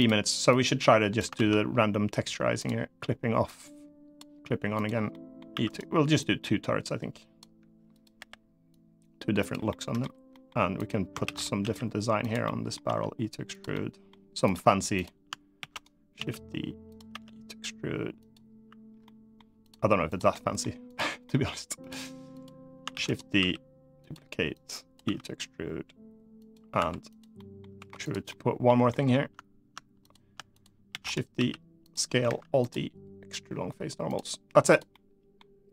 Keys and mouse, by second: 0.3 click, 1.1 ctrl+z, 2.3-3.9 drag, 4.5 click, 4.8 middle click, 5.2 e, 5.4 right click, 5.9-7.1 drag, 7.6 click, 7.9 l, 8.4 click, 9.4 middle click, 10.0 middle click, 10.5 click, 11.0 shift+d, 11.3 s, 11.9 click, 12.2 middle click, 12.6 e, 13.2 click, 13.4 middle click, 14.7 click, 15.3 shift+d, 15.5 click, 15.9 s, 16.6 click, 16.8 e, 17.9 click, 18.8 middle click, 20.0 middle click, 20.9 middle click, 21.5 click, 22.0 click, 22.6 shift+d, 22.8 click, 23.1 s, 23.7 click, 24.3 click, 24.8 e, 26.1 click, 26.5 2, 26.9 click, 27.1 middle click, 27.5 3, 27.7 click, 28.0 middle click, 28.6 middle click, 29.8 click, 30.6 shift+d, 31.1 s, 31.5 click, 32.0 alt+e, 33.8 click, 34.4 click, 34.6 middle click.